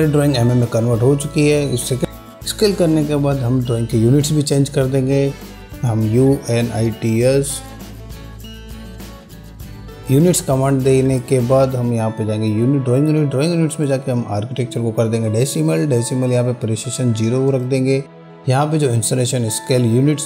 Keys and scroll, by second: 0.2 typing, 5.4-7.3 typing, 11.3 Return.